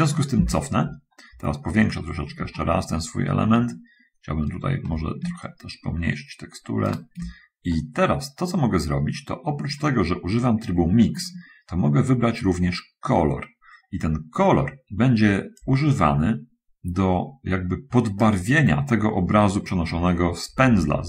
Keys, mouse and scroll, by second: 0.7 ctrl+z, 1.4-2.5 middle drag, 2.8-3.9 shift+middle drag, 4.1 shift+middle click, 5.7-7.2 shift+right drag, 8.0-11.6 shift+middle drag, 15.9-18.7 drag.